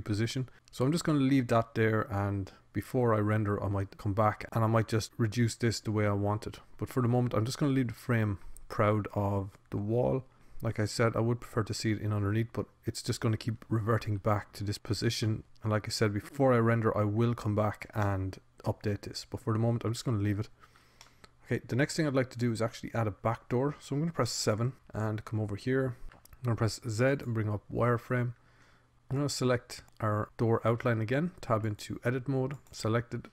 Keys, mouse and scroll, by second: 16.8-18.2 middle drag, 19.5-21.0 middle drag, 21.1-22.2 scroll up 1, 22.2 middle click, 25.0 KP_7, 27.0 Tab, 27.6 z, 28.4 Tab, 29.4 a, 29.8-31.4 drag, 32.4 Tab.